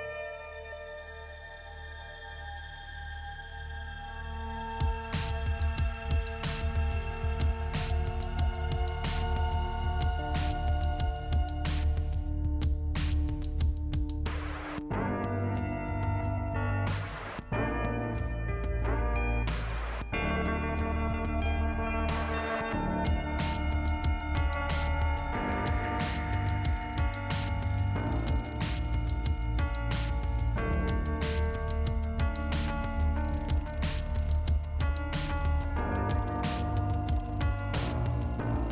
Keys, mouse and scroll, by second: 1.6 click, 3.6 click, 4.2 click, 4.4 click, 5.5 click, 7.6 click, 8.3 click, 10.0 click, 10.6-11.3 scroll down 2, 11.3 click, 13.3 click, 14.3 click, 16.4-16.9 scroll up 1, 18.4-19.6 scroll up 2, 19.6 click, 21.6 click, 21.8 click, 22.6 click, 23.6 click, 24.7 click, 25.3 click, 25.6-26.8 scroll down 1, 29.9 scroll down 2, 31.6 click, 35.3 click, 35.4 click, 36.3 scroll up 2, 38.1 scroll up 1.